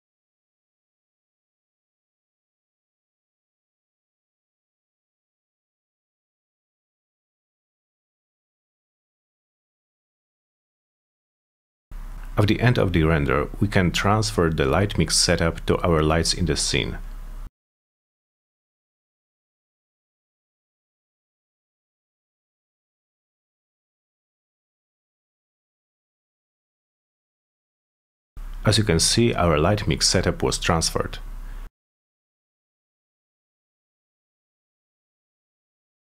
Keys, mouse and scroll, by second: 0.0-2.0 typing, 1.0 click, 1.4 click, 2.3 click, 3.2-5.8 typing, 4.2 click, 6.0 click, 6.5 click, 6.9 5, 7.2 Return, 7.6 click, 8.1 4, 8.4 0, 8.5 click, 9.3 4, 9.9 click, 10.7 4, 10.9 Return, 11.2-14.8 drag, 16.9 click, 18.7 click, 19.7 F3, 19.9 click, 20.6 F3, 22.8 click, 23.9 click, 24.3 click, 24.7 click, 25.8 click, 35.2 click.